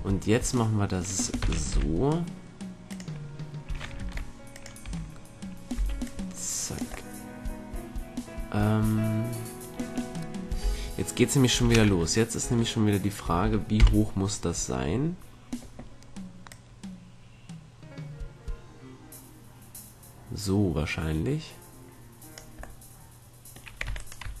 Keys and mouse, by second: 1.5 shift+d, 4.1 ctrl+Tab, 5.0 a, 5.9 b, 10.7 z, 11.7 z, 12.0 Tab, 12.6 Tab, 13.9 KP_1, 16.7-18.5 drag, 22.9-24.4 middle drag, 24.0 Tab.